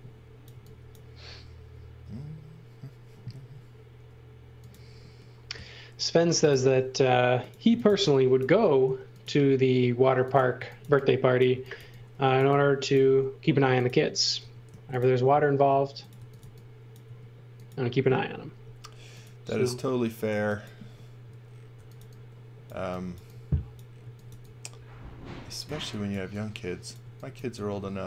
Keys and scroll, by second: 0.0-0.5 typing, 2.0 space, 3.4 l, 6.7-8.9 typing, 10.6-13.1 typing, 14.4 m, 15.9-17.1 typing, 18.5 m, 21.5-24.3 typing, 25.7 x, 26.1 v, 27.0 x, 27.4 v.